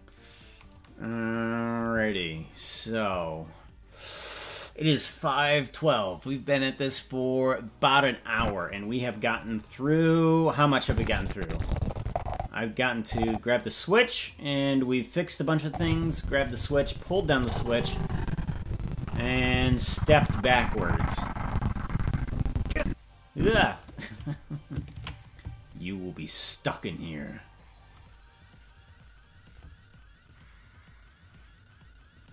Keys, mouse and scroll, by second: 8.3 click, 9.6-10.2 scroll down 10, 10.8-23.7 drag, 27.2 ctrl+s.